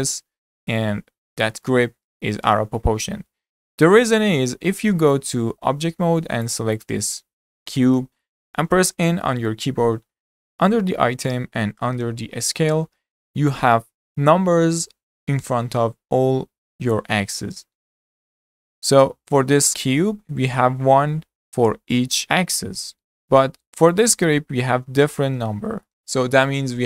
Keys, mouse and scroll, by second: 0.2-1.4 shift+middle drag, 1.4 scroll down 3, 1.7-4.6 shift+middle drag, 4.6 Tab, 6.5 click, 6.8 click, 7.2 scroll up 2, 7.7-9.2 shift+middle drag, 9.2 n, 23.9 click, 25.9 shift+middle click.